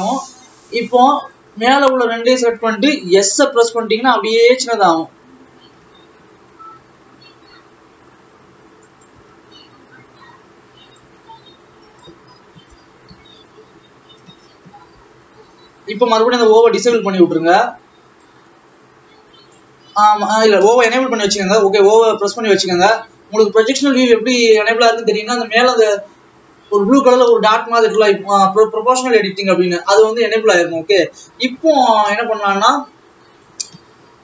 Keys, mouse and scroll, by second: 3.6 s, 9.7 alt+a, 11.1 click, 12.4-13.1 scroll up 2, 13.1 KP_7, 14.0-15.1 scroll down 2, 15.1 n, 15.6 n, 16.7 o, 17.6-18.4 scroll down 1, 18.4-21.3 drag, 21.5 o, 32.6 click.